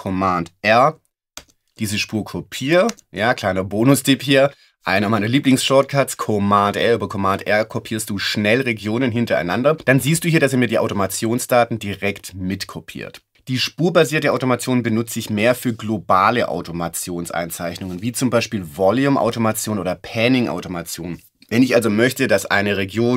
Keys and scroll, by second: 1.4 super+r, 2.9 super+r.